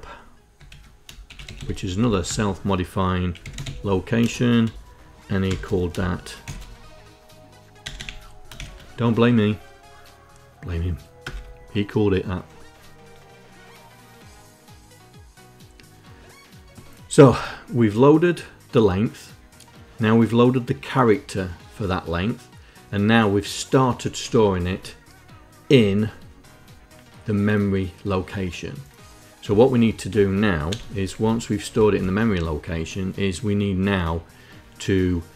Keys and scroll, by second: 0.0-1.8 typing, 2.0 Tab, 2.9-4.0 typing, 6.2 shift+b, 7.6 0, 8.3 shift+b, 10.9 Return, 23.9 End, 29.2 ', 30.4 BackSpace, 30.8 Down, 31.6 Tab.